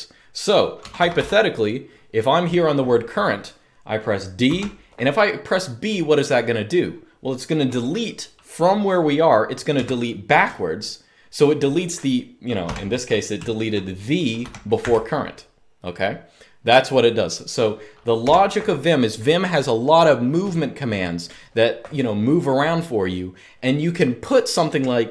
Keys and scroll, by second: 0.5-0.9 typing, 4.2 d, 9.4 b, 12.4-14.5 typing, 17.9 typing.